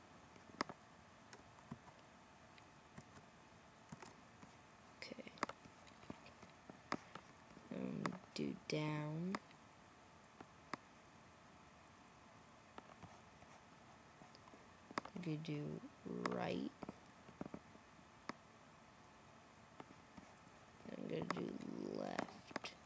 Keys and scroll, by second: 1.6 super+v, 2.9 super+v, 3.8 super+v.